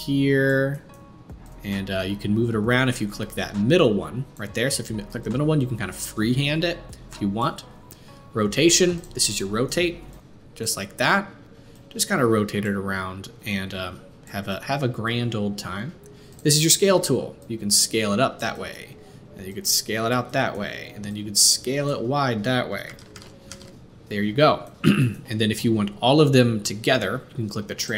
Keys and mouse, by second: 23.0 ctrl+z, 23.2 ctrl+z, 23.6 ctrl+z, 25.0-27.9 drag.